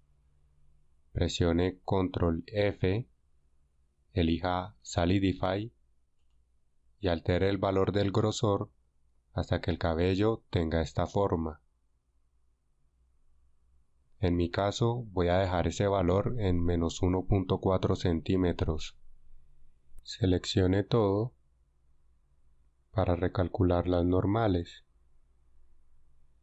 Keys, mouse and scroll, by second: 2.5 ctrl+f, 8.7 F6, 21.6 a, 22.3 a, 25.9 ctrl+n.